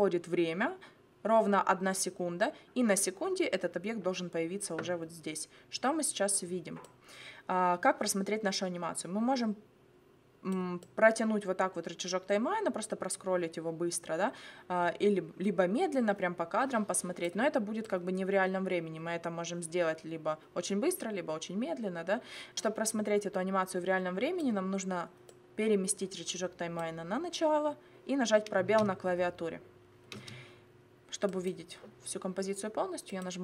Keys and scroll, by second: 28.7 space, 30.1 space.